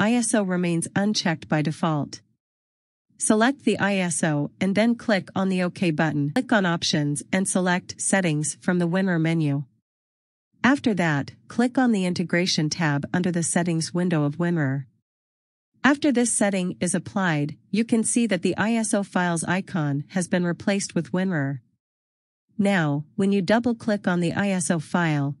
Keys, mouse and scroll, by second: 4.1 click, 18.3 click.